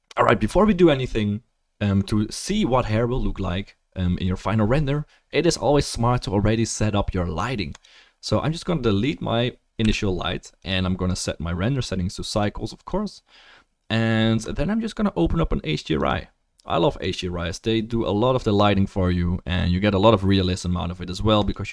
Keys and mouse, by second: 9.0 click, 9.8 Delete, 11.1-14.6 drag, 16.0-21.6 drag.